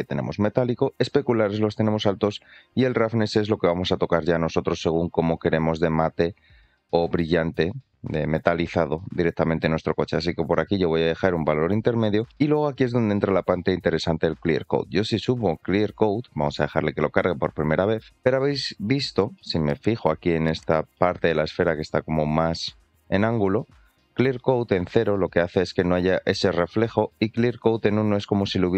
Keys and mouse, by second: 0.9 click, 2.5-12.0 drag, 14.8-15.8 drag, 18.1-18.9 drag, 19.2-19.8 shift+middle drag, 20.3-20.7 middle drag, 20.9-21.2 shift+middle drag, 23.3-28.3 drag.